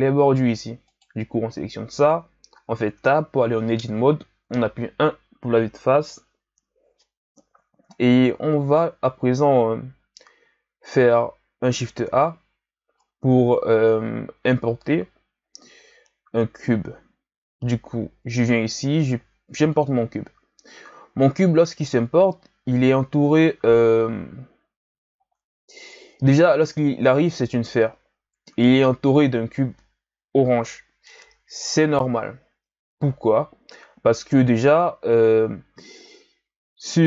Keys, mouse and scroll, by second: 0.1-0.9 scroll up 1, 0.9 right click, 3.0 Tab, 4.4 KP_1, 8.0-11.3 ctrl+scroll down 2, 11.9 shift+a, 21.4-22.3 scroll up 3, 22.3-23.4 scroll down 4, 23.4-25.1 scroll up 2, 25.1-28.2 scroll down 1.